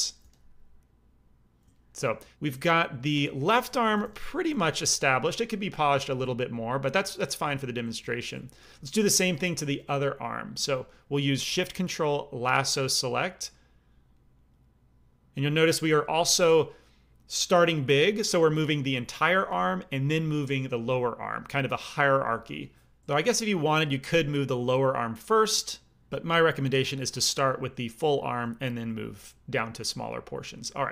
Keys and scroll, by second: 0.1 f, 3.8 g, 4.0 f, 4.4 f.